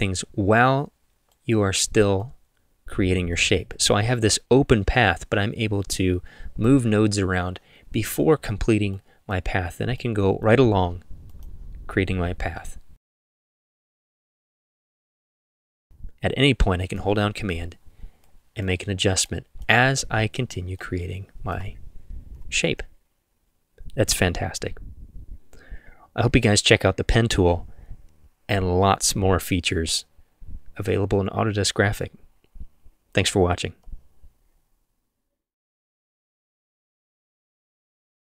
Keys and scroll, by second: 22.4 v.